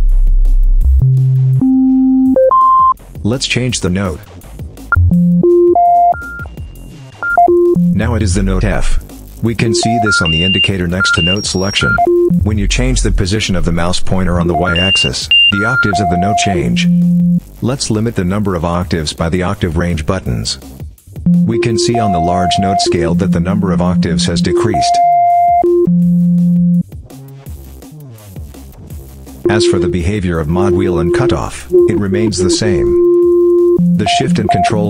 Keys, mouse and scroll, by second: 3.7 click, 4.7-8.9 drag, 9.3-10.6 drag, 10.8-13.1 drag, 13.3-15.0 drag, 17.9-19.2 drag, 19.7-20.7 drag, 21.0-26.8 drag, 29.2-34.8 drag.